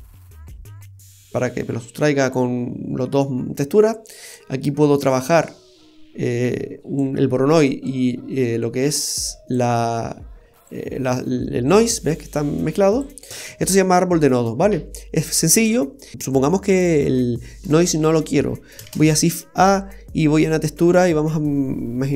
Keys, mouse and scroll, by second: 3.7 click, 5.0 click, 7.9 click, 10.6 click, 13.3-13.6 scroll down 5, 13.6 scroll up 1, 14.4-14.8 scroll down 2, 16.7 click, 17.7 Delete, 18.8 shift+a.